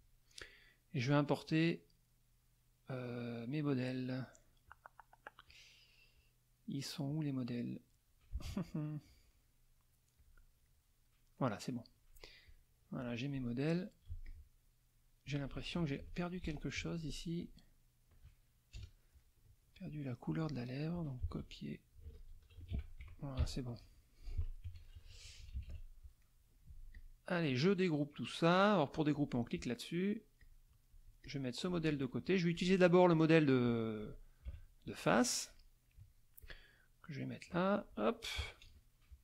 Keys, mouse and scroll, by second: 1.4 click, 4.6 click, 5.4 click, 6.2 click, 7.1 click, 10.2 click, 11.4 click, 12.5-13.5 drag, 14.1 z, 14.2 click, 15.7 ctrl+KP_5, 16.8 F2, 17.4 click, 18.7 KP_Add, 19.2 middle click, 20.3 click, 21.2 ctrl+c, 21.7 ctrl+click, 22.6 ctrl+shift+v, 23.4 ctrl+KP_5, 24.6 F1, 24.9 KP_Subtract, 26.2 click, 26.9 click, 27.5 middle click, 29.1 click, 30.4 click, 31.2-32.4 drag, 32.5 ctrl+click, 33.1-34.1 ctrl+drag, 34.4 ctrl+KP_Subtract, 35.1 middle click, 36.4-37.9 drag, 38.4 KP_Add.